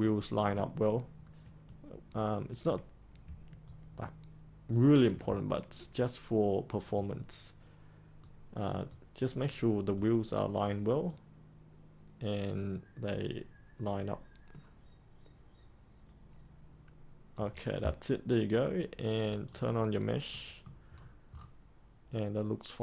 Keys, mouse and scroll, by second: 3.6 ctrl+right click, 6.9-10.2 right drag, 11.0-17.3 drag, 20.2 middle click, 20.9-22.8 scroll up 1.